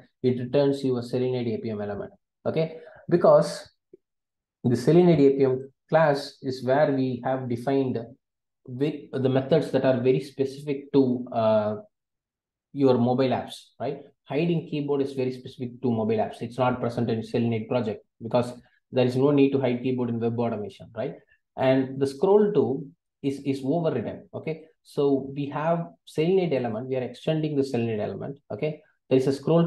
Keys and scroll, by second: 5.1 super+b, 27.1 super+b.